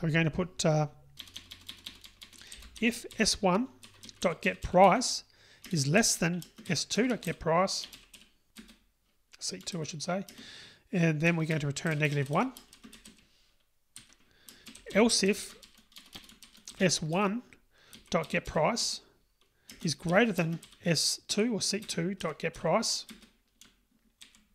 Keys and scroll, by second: 11.5 Return, 18.8 Return.